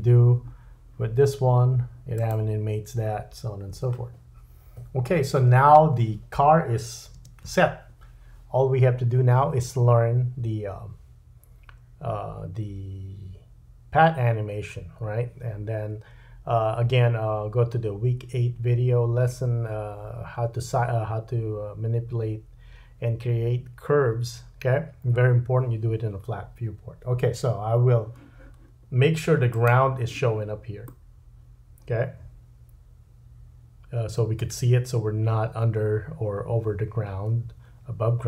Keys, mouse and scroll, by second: 7.2 space, 29.6 click, 30.9 middle click.